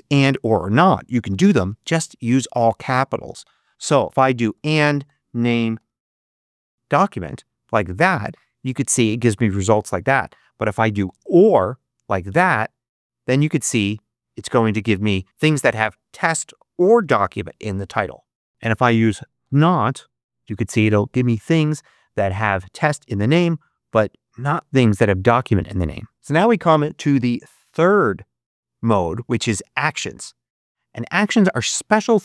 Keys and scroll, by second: 1.0-2.1 typing, 3.1 space, 4.2-7.1 typing, 10.6-11.5 typing, 18.5-20.0 typing.